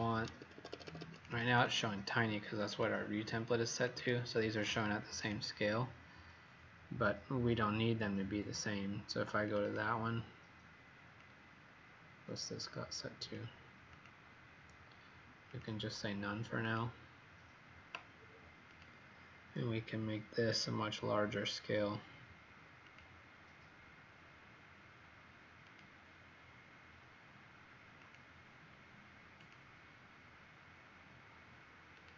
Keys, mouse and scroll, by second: 0.1 Escape, 0.4 Escape, 0.6 Escape, 0.7 Escape, 0.9 Escape, 1.1 Escape, 1.1 click, 1.3 click, 1.4 click, 1.7 click, 2.7 click, 9.6 click, 11.1 click.